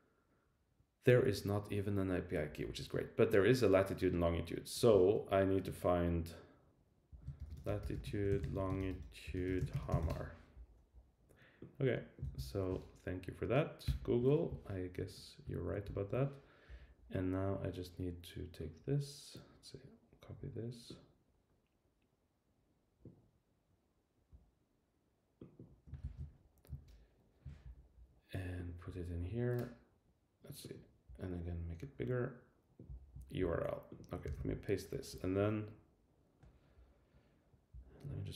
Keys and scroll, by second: 7.1 super+t, 10.0 Return, 12.2 super+c, 13.8 shift+super+[, 15.4 super+w, 15.8 shift+super+[, 26.0 super+c, 34.2 super+v.